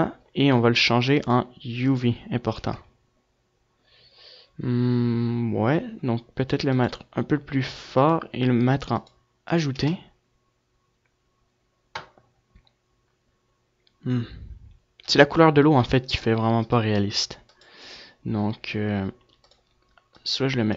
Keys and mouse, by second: 14.6 F11, 19.4-20.6 drag.